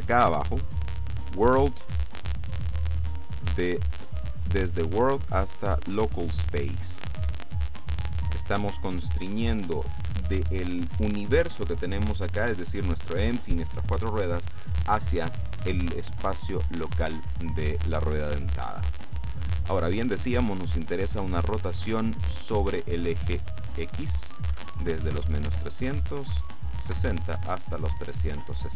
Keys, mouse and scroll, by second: 1.1 click, 4.0 click, 6.2 click, 23.5 click, 24.6 KP_Subtract, 24.9-26.3 typing, 25.6 Tab, 27.0 KP_Enter.